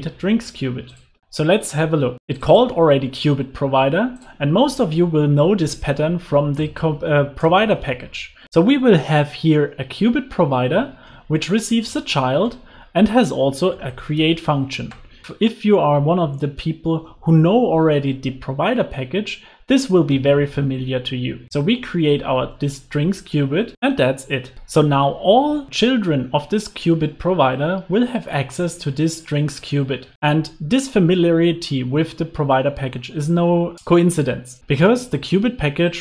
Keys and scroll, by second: 4.9 alt+Return, 8.4 Return, 14.2 Return, 21.7 Return, 23.4 Return, 23.5 super+s, 23.7 alt+super+l, 23.8 super+s.